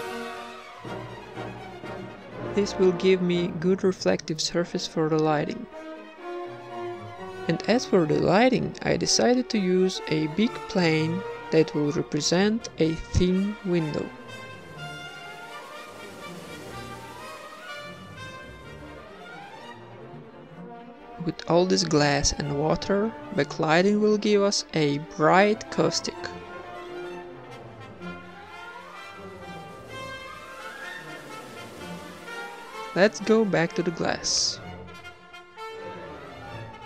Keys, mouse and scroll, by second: 0.5 middle click, 0.7 click, 1.1 click, 1.7 click, 2.6 ctrl+s, 3.2 middle click, 3.3 KP_1, 3.5 shift+a, 4.2 middle click, 4.3 middle click, 4.6 r, 5.4 r, 5.9 s, 6.6 g, 7.6 middle click, 8.5 s, 9.6-12.5 typing, 13.2-14.2 drag, 14.7 click, 17.2 s, 18.4 middle click, 18.6 Tab, 18.9 ctrl+r, 19.1 ctrl+r, 19.5 ctrl+Tab, 19.7 a, 19.8 right click, 20.4 ctrl+a, 20.4 Tab, 20.7 ctrl+b, 20.7 click, 21.4 x, 21.7 Tab, 22.1 ctrl+s, 22.5 click, 23.4 ctrl+s, 24.7 right click, 25.2 ctrl+s, 26.0 middle click, 26.1 middle click, 26.4 ctrl+s, 27.0 ctrl+s, 27.2 shift+a, 28.3 click, 29.1 g, 29.5 r, 29.6 g, 30.4 g, 31.4 click, 31.4 middle click, 32.5-33.1 middle drag, 32.9 g, 34.2 click, 35.0 ctrl+s.